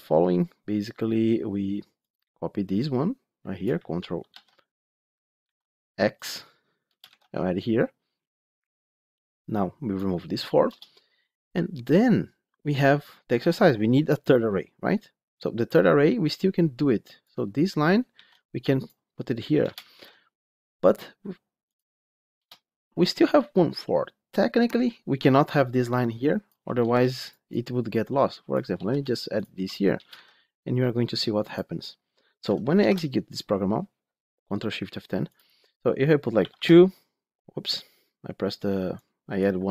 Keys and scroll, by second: 4.2 ctrl+c, 5.3 ctrl+x, 9.5 ctrl+v, 18.0 ctrl+x, 19.8 ctrl+v, 26.7 ctrl+c, 30.0 ctrl+v, 32.7 ctrl+shift+F10.